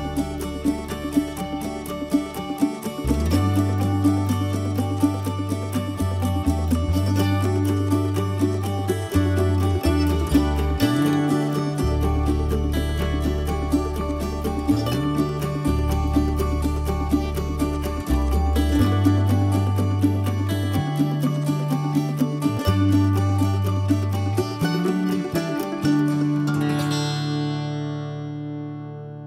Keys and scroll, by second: 4.4 l, 6.0 p, 6.7 space, 7.5 ctrl+x, 9.4 p, 10.7 Escape, 11.4 ctrl+z, 12.7 Escape, 14.5 Escape, 15.0 ctrl+z, 16.2 i, 18.2 p, 19.6 Escape, 20.8 Escape, 20.9 Escape.